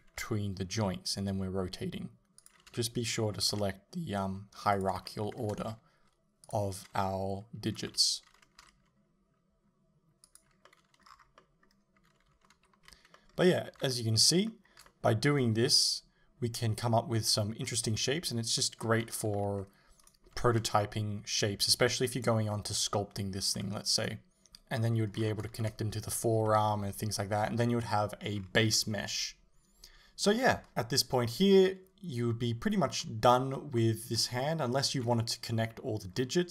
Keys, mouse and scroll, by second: 2.4 ctrl+z, 2.4 r, 2.7 l, 3.6 r, 5.1-6.5 shift+middle drag, 5.7 a, 6.5 click, 7.9 l, 8.6 r, 10.4 click, 10.7-20.1 middle drag, 11.1-11.4 scroll down 2, 12.6 alt+h, 13.8 a, 19.1 Tab, 20.1 right click, 20.4 r, 22.3 right click, 22.5-24.1 middle drag, 23.4 r, 24.1 right click, 24.9-28.5 middle drag, 25.2 scroll down 1, 28.4 scroll up 1, 30.6 middle click, 33.0 scroll up 1, 33.8 shift+middle click, 35.1 KP_7, 36.2-36.5 middle drag, 36.2 scroll up 1, 36.4-36.5 scroll down 1.